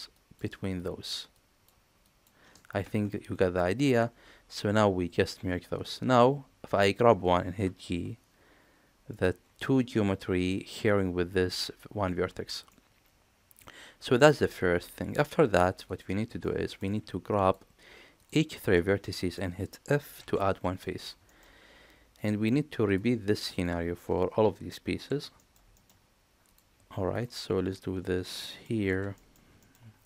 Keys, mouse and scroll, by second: 3.6 middle click, 5.7 click, 7.9 g, 12.7-14.8 middle drag, 15.8 click, 16.4 middle click, 18.2 shift+click, 18.6 middle click, 20.2 f, 20.8 middle click, 21.3 shift+middle click, 22.1 click, 23.5 shift+click, 25.1 f, 25.4 middle click, 25.7 shift+middle click, 26.5 click, 27.1 click, 27.7 click, 28.2 middle click, 28.9 f, 29.2 middle click, 29.6 shift+middle click.